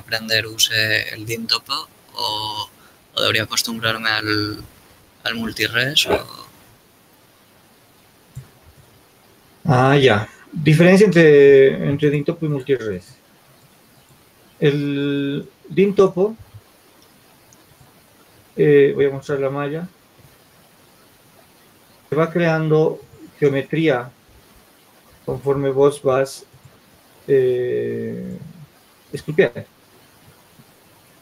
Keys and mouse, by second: 13.1-15.5 drag, 17.4 Tab, 18.6 shift+z, 22.4 Tab, 23.4 Tab.